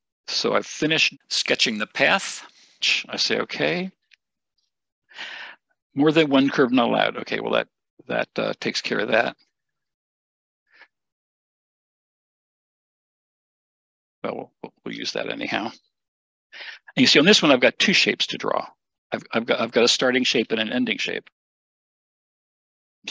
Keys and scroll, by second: 9.8 Escape, 9.9 Escape, 11.0 BackSpace.